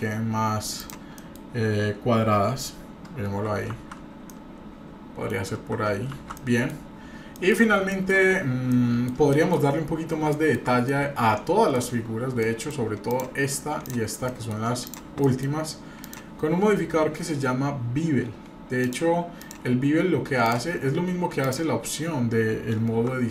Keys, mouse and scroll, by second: 1.1 middle click, 3.8 shift+z, 4.3-5.3 middle drag, 5.4-5.8 scroll down 2, 6.1 shift+z, 6.3-6.7 middle drag, 6.8-7.2 scroll down 3, 7.3 middle click, 7.9 shift+middle drag, 8.2-8.7 scroll up 2, 8.7 middle click, 9.3 shift+middle drag, 9.8-10.2 scroll up 2, 10.3 shift+middle click, 10.8-11.7 shift+middle drag, 12.0-12.4 scroll down 3, 12.4 middle drag, 13.1 click, 13.8 drag, 14.3-14.6 shift+middle drag, 14.8 click, 15.2 shift+middle click, 16.0 drag, 19.4 click, 20.4 click, 21.4 click, 22.9 Tab.